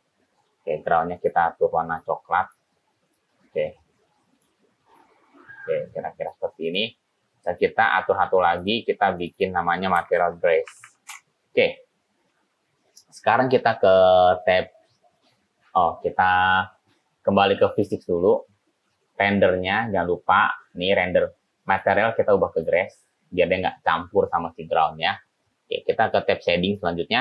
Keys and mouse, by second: 7.6 drag, 9.3 click, 9.5-12.0 drag, 11.0 s, 17.8 click, 21.8-22.9 drag.